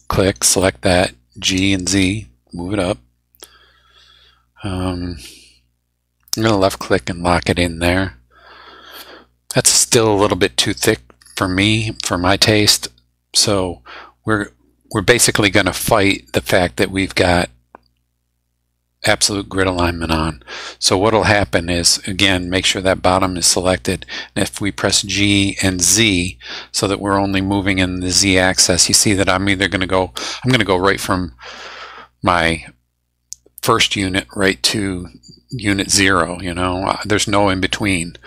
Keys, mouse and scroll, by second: 0.6 middle click, 1.5 g, 2.0 z, 6.3 click, 6.8-12.9 middle drag, 21.9 middle click, 23.2 click, 24.8 g, 25.7 z.